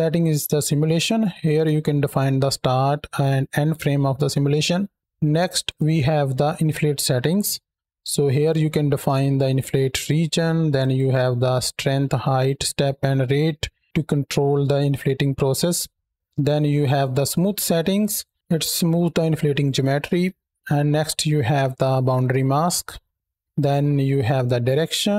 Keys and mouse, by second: 0.0 click, 0.5 middle click, 5.5 click, 6.0-7.2 middle drag, 8.2-9.9 drag, 23.1 click, 23.4 click.